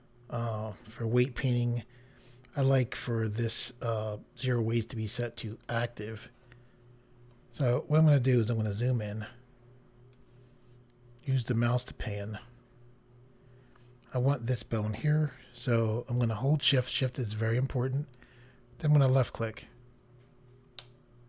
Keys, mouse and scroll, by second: 5.5 click, 7.4-8.0 scroll up 1, 8.0 scroll up 1, 10.1 click, 14.0 scroll up 1, 18.1 shift+click, 19.7 scroll down 2, 20.8 middle click.